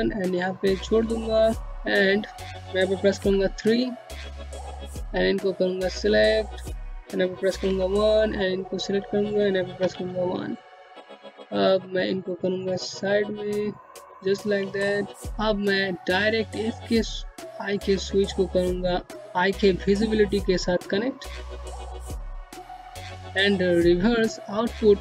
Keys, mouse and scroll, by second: 2.0 3, 2.8 click, 5.3-5.7 scroll down 1, 6.5 1, 7.2 click, 8.6 1, 9.7 click, 13.1 scroll up 1, 13.5 middle click, 14.2 click, 20.9 click.